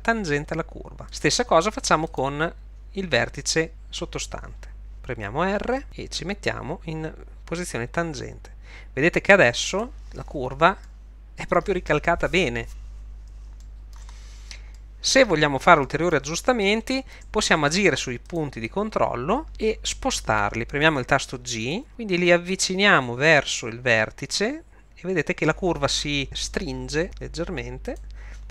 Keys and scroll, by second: 5.8 r, 19.5 Escape, 21.7 g.